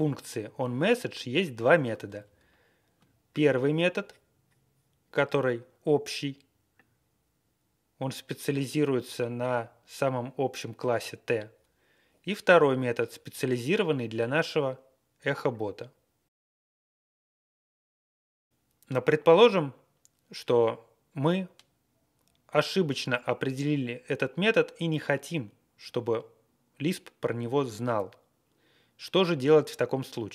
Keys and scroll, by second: 0.0 Right, 0.1-2.4 Right, 1.0-1.4 Left, 2.2 Down, 4.2 scroll down 1, 18.5 scroll down 2.